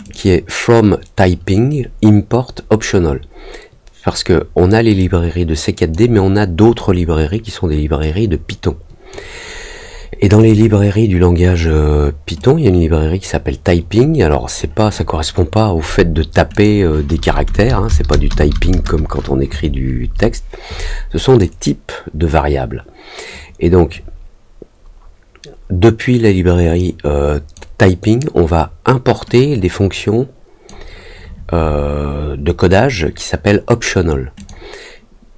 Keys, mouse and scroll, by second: 0.0 click, 4.9 click, 6.7-9.1 drag, 10.3 click, 12.3-13.8 drag, 16.5 click, 26.2-27.5 drag, 29.3-30.6 drag, 34.3 click.